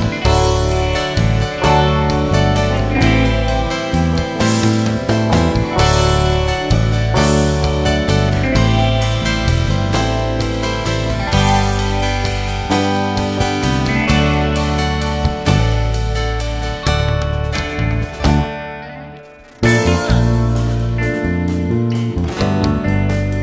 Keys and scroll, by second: 13.6 ctrl+v.